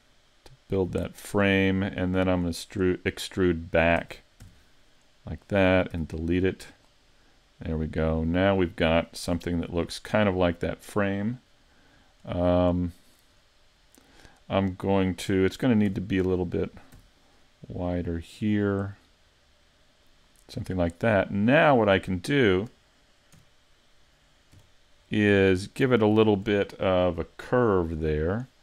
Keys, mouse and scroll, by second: 1.2 click, 1.5 middle click, 4.0 e, 5.6 click, 5.9 x, 7.2 middle click, 8.6 scroll down 3, 9.3 Tab, 10.1 middle click, 11.5-12.1 scroll down 6, 12.3 middle click, 13.3 scroll up 4, 13.8 middle click, 15.9 s, 20.2 click, 20.7-21.3 scroll up 4, 21.2 middle click, 23.4 KP_Decimal, 24.6 KP_5, 26.0 shift+middle click, 28.0 middle click.